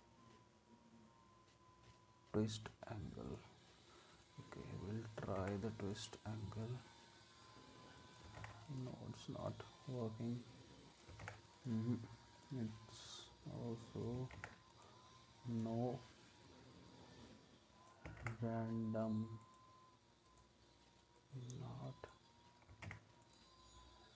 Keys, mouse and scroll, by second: 5.4 ctrl+z, 8.4 ctrl+z, 11.2 ctrl+z, 14.3 ctrl+z, 18.2 ctrl+z, 22.8 ctrl+z.